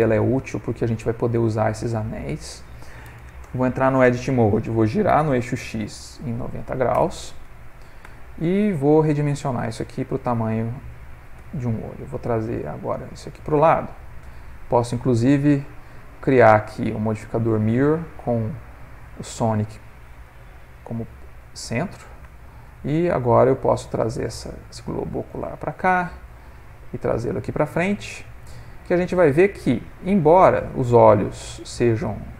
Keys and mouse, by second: 0.3 ctrl+middle click, 3.5 Tab, 5.1 r, 8.1 Tab, 8.7 Tab, 9.0 s, 11.4 Tab, 12.4 g, 14.9 click, 18.5 click, 20.6 ctrl+middle click, 21.4 click, 21.7 g, 22.6 click, 22.9 g, 25.6 click, 26.3 g, 29.3 middle click, 30.9 ctrl+middle click, 32.2 middle click.